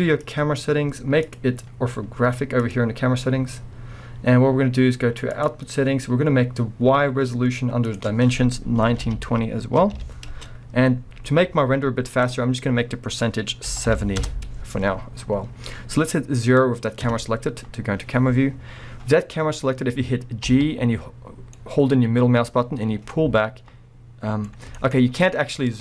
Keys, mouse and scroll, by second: 0.2 click, 1.2-5.4 drag, 7.8-24.9 drag, 10.4 Return, 14.2 Return, 15.1 scroll, 15.2-17.1 scroll down 1, 17.1 KP_0, 20.4 g, 24.9-25.3 right drag, 25.0 scroll down 1, 25.3-25.8 middle drag, 25.7 scroll.